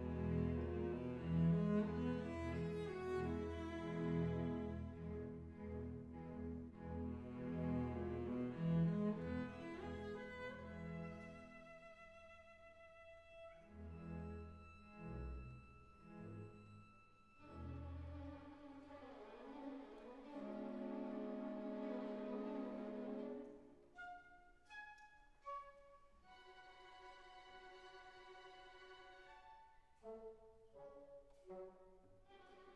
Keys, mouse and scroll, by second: 0.8 click, 2.3 click, 4.4 click, 5.1 Tab, 6.7 shift+a, 11.7-13.0 drag, 13.9 click, 15.7 click, 18.0 s, 20.5 click, 21.0 KP_Decimal, 22.4 s, 24.9 click, 28.1 s, 31.4 click.